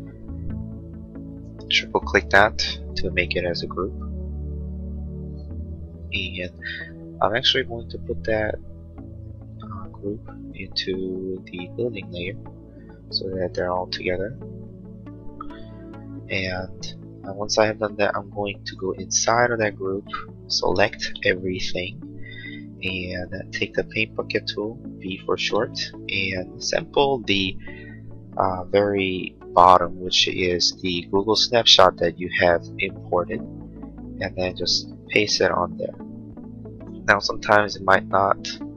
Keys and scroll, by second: 1.5 space, 20.8 ctrl+a, 24.5 b.